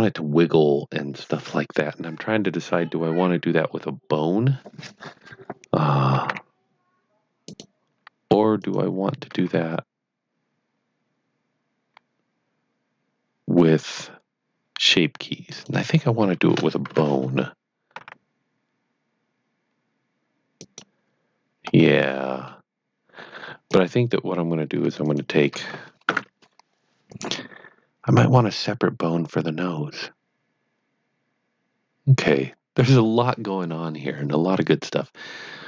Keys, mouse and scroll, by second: 7.5 right click, 8.6 click, 9.0-10.0 typing, 15.2-16.8 typing, 15.5 right click, 18.0 r, 20.5 right click, 21.6-22.0 scroll up 1, 22.0 middle click, 23.7 click, 25.0 shift+click, 27.0 click, 35.2-35.6 scroll down 1.